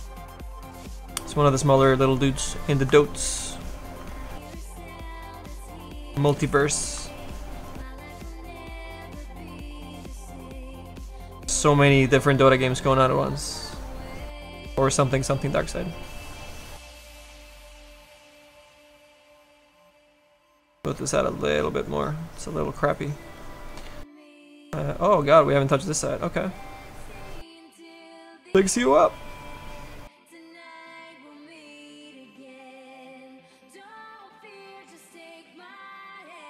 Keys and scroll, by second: 8.6 s, 9.3 s, 30.7 s.